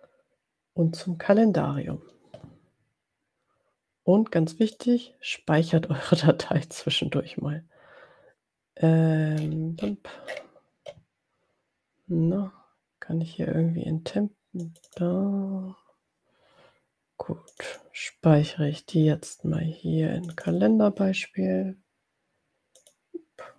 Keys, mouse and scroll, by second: 4.5 click, 9.5-10.5 scroll down 3, 10.5 scroll up 2, 14.7 click, 17.7 click, 20.2 click, 23.0 click.